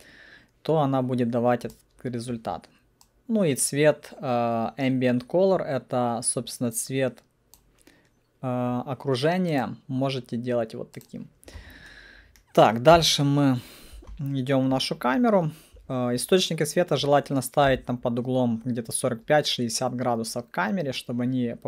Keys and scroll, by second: 13.0 c.